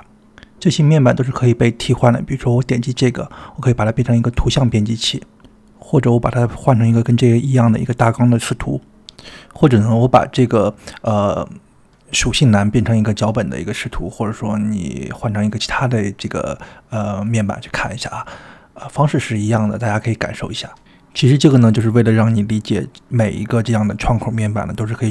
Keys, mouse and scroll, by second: 8.7 click, 23.7-24.8 drag.